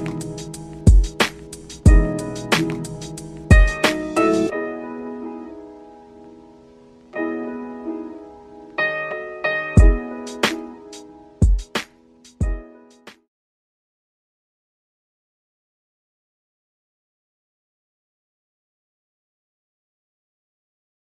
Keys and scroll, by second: 0.9 ctrl+z, 1.9 ctrl+g.